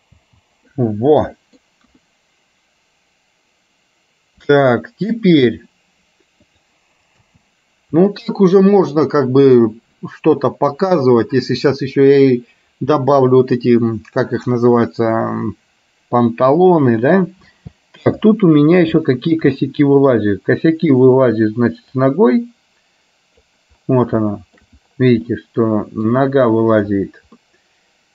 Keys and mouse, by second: 0.3 space, 0.8 middle click, 1.9 KP_1, 4.7 shift+middle click, 6.6 click, 7.4 space, 17.7 space, 19.1 shift+middle click, 19.7 middle click, 22.2-23.7 drag, 24.3 shift+middle click, 25.3 middle click, 27.6-28.1 middle drag.